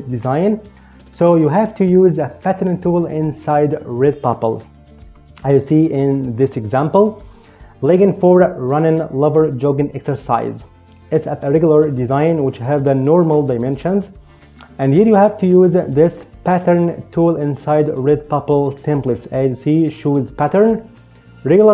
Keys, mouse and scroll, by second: 6.6 click, 15.3 click.